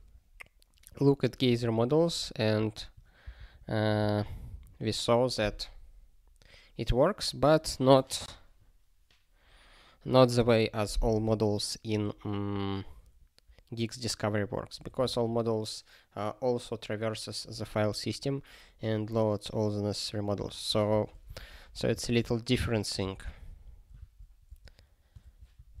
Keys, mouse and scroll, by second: 1.6 ctrl+g, 12.0 click, 12.1 click, 12.9 click, 13.1 click, 20.8 ctrl+a, 21.5 ctrl+alt+@, 22.0 ctrl+g, 24.5-25.8 typing.